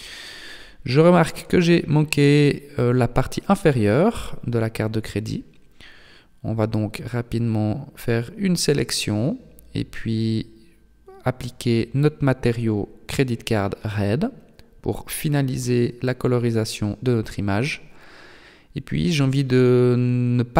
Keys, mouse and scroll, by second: 2.7 scroll up 2, 6.8 alt+right click, 7.8 alt+shift+right click, 8.8 middle click, 11.4 click, 12.0 click, 12.9 middle click, 14.6 middle click, 15.7-17.0 scroll up 1, 17.0 right click, 17.8 alt+right click, 19.1 right click, 20.1 shift+right click, 20.2 shift+right click.